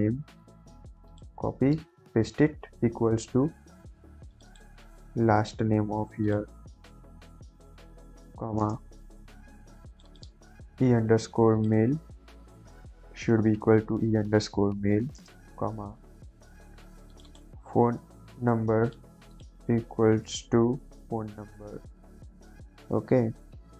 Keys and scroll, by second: 1.9 ctrl+v, 2.9 =, 3.4 =, 5.1 ctrl+c, 6.9 ctrl+v, 8.5 ,, 8.5 space, 10.6 ctrl+c, 12.3 Left, 12.9 ctrl+v, 13.3 =, 13.6 ctrl+v, 14.8 ,, 15.1 space, 17.9 ctrl+c, 20.2 ctrl+v, 20.4 =, 20.8 ctrl+v.